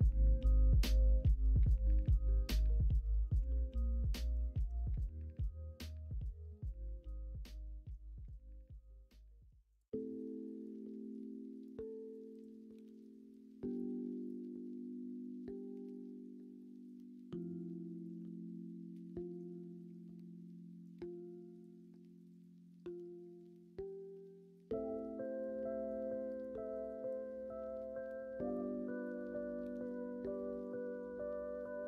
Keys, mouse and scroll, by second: 3.1-4.6 ctrl+z, 17.5 click, 18.1 ctrl+z, 25.6-26.8 drag.